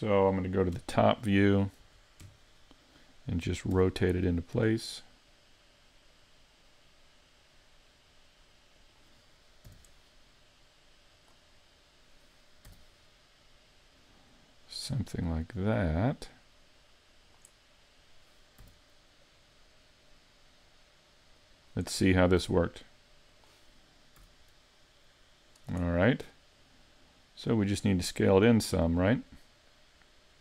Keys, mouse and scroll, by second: 0.8 KP_7, 1.8 z, 2.2 KP_5, 3.7 r, 8.9 click, 9.7 g, 11.3 click, 11.5-12.1 scroll up 2, 12.1 scroll up 1, 12.7 r, 15.6 click, 18.6 g, 21.5 click, 22.4 r, 23.4 click, 24.2 z, 24.7 middle click, 26.6 click, 28.7 middle click.